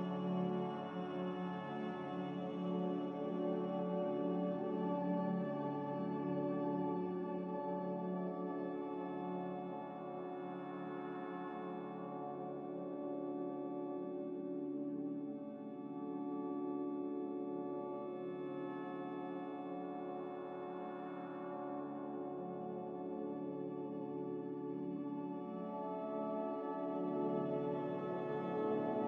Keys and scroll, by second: 1.8 n, 4.9 Escape, 5.3 m.